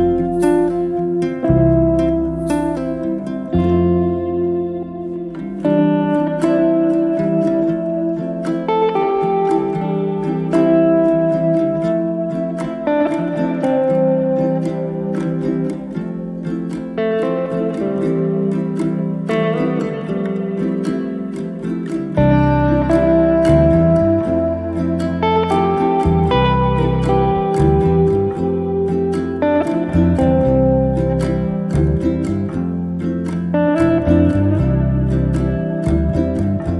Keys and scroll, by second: 1.8 4, 2.2 Return, 2.9 space, 10.1 KP_Divide, 10.4 4, 11.1 Return, 14.7 f, 16.2 0, 16.5 KP_Decimal, 16.7 5, 17.1 Return, 23.4 e, 29.1 p, 30.7 2, 31.1 Return, 33.4 space.